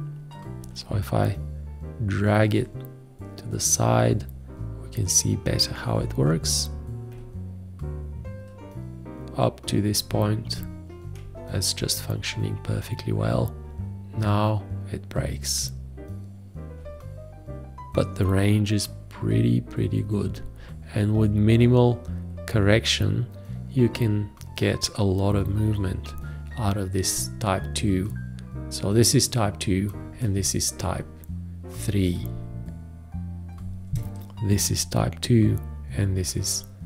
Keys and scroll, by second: 33.2 F5.